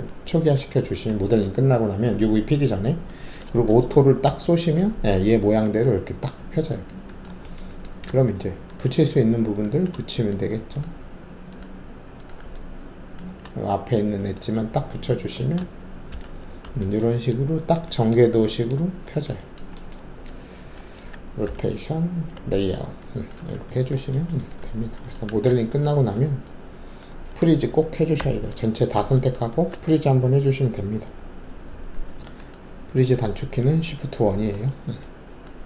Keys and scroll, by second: 4.2 ctrl+alt+shift+a, 8.0 alt+2, 16.1 alt+shift+v, 21.4 c, 22.1 z, 23.3 alt+`, 25.2 alt+shift+a, 28.1 shift+1.